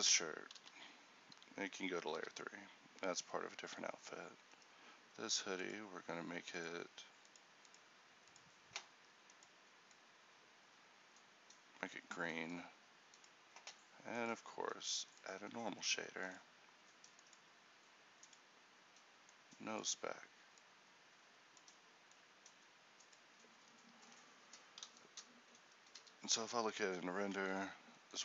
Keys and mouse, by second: 0.6 m, 24.2 a.